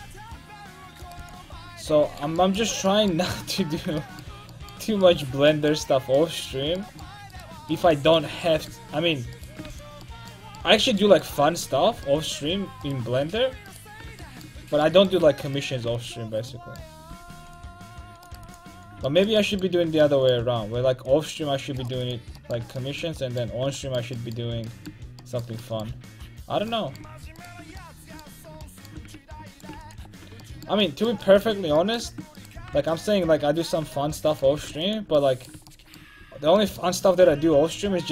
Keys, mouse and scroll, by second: 0.1 c, 1.3 x, 7.4-8.7 right drag, 9.8 x, 12.9-15.1 right drag, 16.0 x, 17.2 c, 18.5 x, 21.9 c, 27.5-31.5 right drag, 29.8 x, 31.5 middle click, 32.4 right click, 32.6 g, 34.6 g, 36.3 a, 37.3 c.